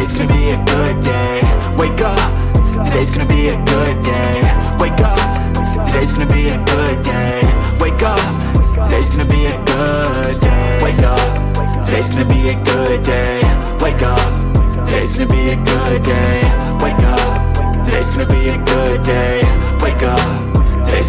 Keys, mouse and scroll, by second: 2.6 double click, 10.6 typing, 16.8-17.6 typing.